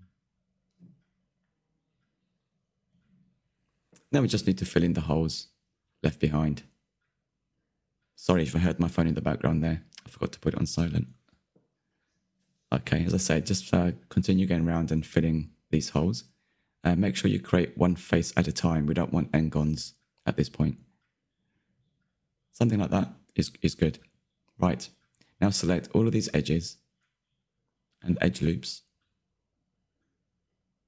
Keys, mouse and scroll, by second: 0.2 Delete, 0.9 middle click, 1.6-2.0 scroll up 2, 2.0 2, 3.2-4.4 middle drag, 4.4 click, 4.7-7.8 middle drag, 8.9 f, 9.6 click, 9.8 middle click, 11.9 f, 12.4 middle click, 13.2 click, 14.6 f, 14.9 click, 15.1-16.4 middle drag, 16.4 click, 16.7 middle click, 17.5 shift+click, 18.3 f, 18.6 middle click, 19.2 click, 20.4 f, 20.9 click, 21.1 Tab, 21.4 scroll down 1, 21.7-24.7 middle drag, 24.7 Tab, 25.1 alt+click, 25.4 middle click, 25.6-25.9 scroll up 1, 25.9 click, 26.6 alt+shift+click, 27.1 shift+click, 27.3 shift+click, 27.5 shift+click, 28.0 middle click, 28.5 alt+shift+click, 28.7 middle click, 28.9 alt+shift+click, 29.1-30.3 middle drag, 30.3 shift+click, 30.7 middle click.